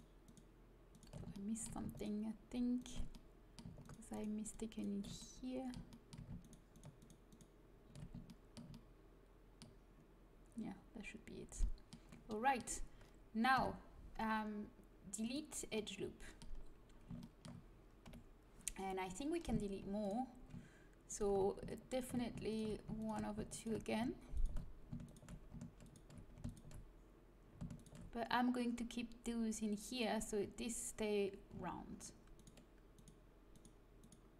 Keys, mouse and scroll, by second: 1.3-3.3 drag, 3.3-10.6 middle drag, 8.7 click, 11.3-13.5 middle drag, 13.5 Delete, 18.0 KP_1, 20.0 right click, 21.0-29.8 right drag, 32.3-34.3 right drag.